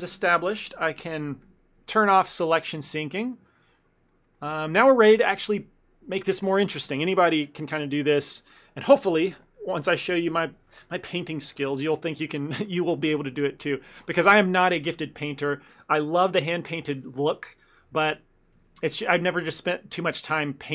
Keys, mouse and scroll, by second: 2.4 click, 3.2 middle click, 3.5 ctrl+middle click, 3.8 middle click, 4.6 ctrl+middle click, 4.9 middle click.